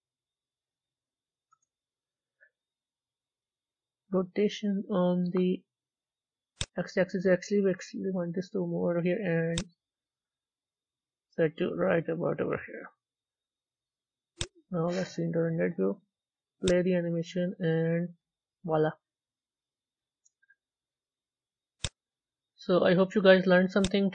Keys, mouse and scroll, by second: 1.4-12.4 drag, 14.4 z, 16.5 click, 21.7 click, 23.8 z.